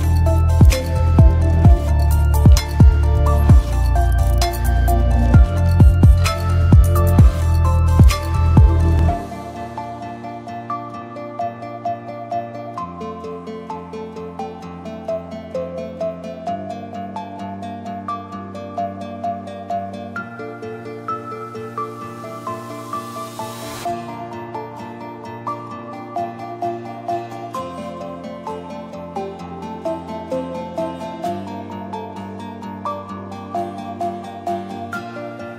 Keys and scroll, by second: 1.4 ctrl+d, 6.2 d, 10.2 ctrl+d, 11.9 ctrl+z, 12.1 ctrl+z, 12.2 ctrl+z, 12.5 ctrl+z, 12.7 ctrl+z, 13.1 ctrl+z, 13.5 ctrl+z, 15.2 d, 17.1 ctrl+d, 19.1 ctrl+d.